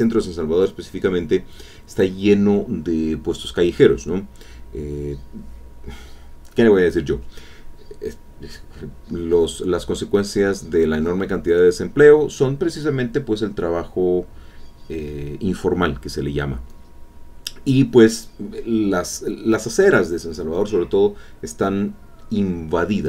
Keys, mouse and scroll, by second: 5.4-8.2 drag, 8.3-10.3 drag, 10.4-14.6 drag, 16.8 middle click, 17.1 click.